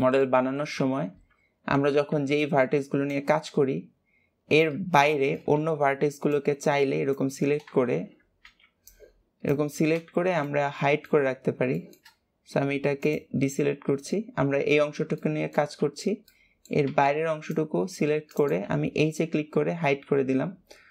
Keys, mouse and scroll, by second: 0.5 ctrl+s, 1.6-2.1 scroll up 2, 2.1 b, 5.1 shift+middle click, 5.5 b, 10.3 middle click, 11.3 scroll up 2, 11.7 shift+middle click, 12.1-12.9 scroll up 1, 12.9 shift+click, 13.6-14.0 shift+scroll down 3, 15.1-16.8 shift+middle drag, 16.8 c, 20.6-20.9 scroll up 2.